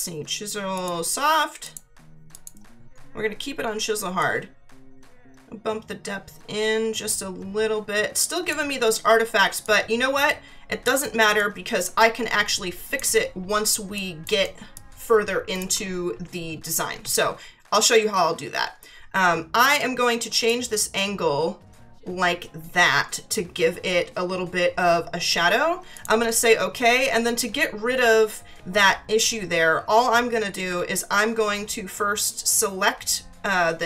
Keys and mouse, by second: 0.7 click, 4.2 click, 9.6 click, 11.4 click, 13.9 click, 14.4 space, 14.7 click, 20.3 click, 25.9 click.